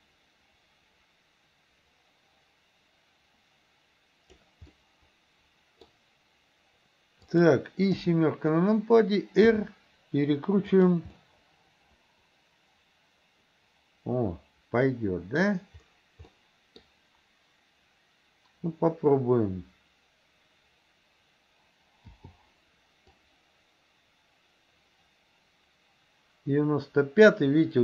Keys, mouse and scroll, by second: 4.8-5.9 middle drag, 7.3 click, 7.9 KP_7, 9.4 r, 11.2-15.4 middle drag, 16.4 middle click, 22.2 i, 23.2-27.8 drag.